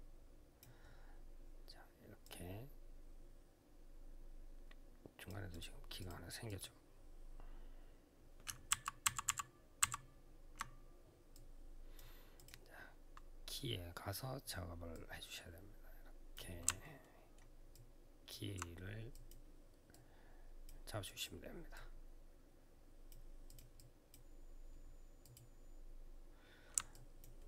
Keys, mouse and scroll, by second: 5.0 click, 5.3 click, 5.8 click, 5.8 double click, 6.2 click, 8.5 ctrl+z, 11.4 click, 12.1 click, 14.7 click, 16.8 alt+middle click, 17.5 alt+click, 18.9 click, 19.7 click, 20.4 click, 20.8 click, 21.5 click, 23.2 click, 23.5 click, 25.0 click, 26.7 alt+click, 27.1 alt+middle click.